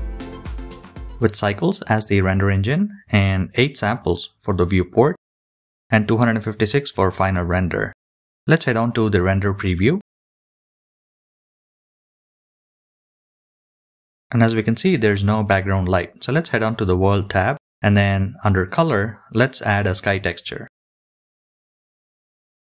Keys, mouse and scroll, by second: 14.5 KP_0.